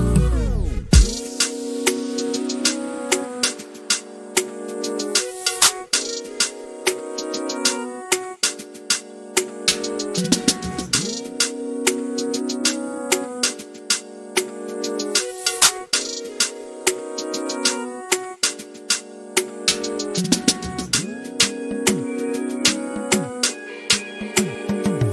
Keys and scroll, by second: 5.5 p, 6.9 l, 8.8 r, 19.5 f, 21.6 typing, 24.6-25.1 typing.